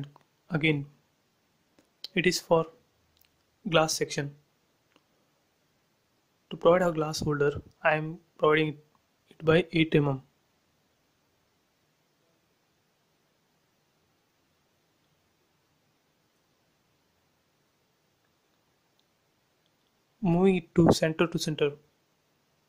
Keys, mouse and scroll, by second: 1.6 click, 3.8 scroll up 1, 4.1 f, 4.6 click, 5.6-6.9 typing, 6.5 Return, 7.4 scroll up 1, 7.7 click, 8.5 ctrl+x, 8.8 space, 9.8 scroll up 1, 10.1 p, 11.1 click, 12.9-14.7 typing, 15.5 Return, 15.8 space, 16.1 click, 16.3 space, 16.6 middle click, 17.6 scroll up 1, 19.1 click, 19.4 scroll up 1, 21.4 m, 22.1 click.